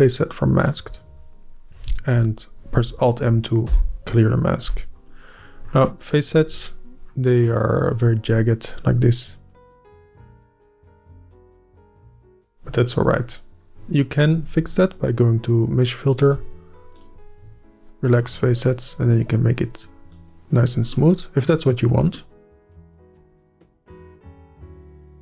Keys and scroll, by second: 3.8 alt+m, 14.7-16.4 space.